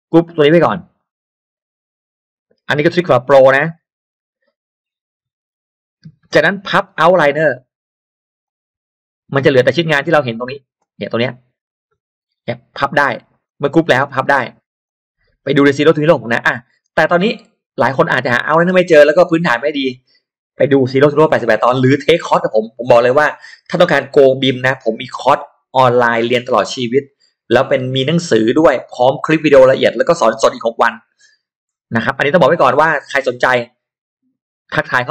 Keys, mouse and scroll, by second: 0.9 right click, 3.6 click, 8.4 click, 9.8-10.4 scroll up 2, 13.4 click, 14.8 click, 16.2 middle click.